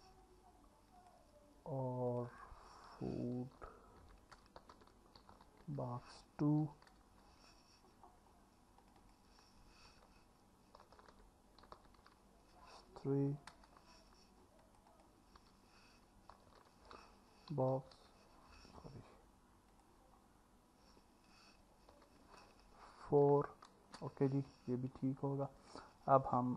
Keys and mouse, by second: 2.3-7.0 drag, 9.0-13.6 drag, 11.0 o, 14.9-17.8 drag, 16.5 o, 19.9-23.9 drag, 25.6 click.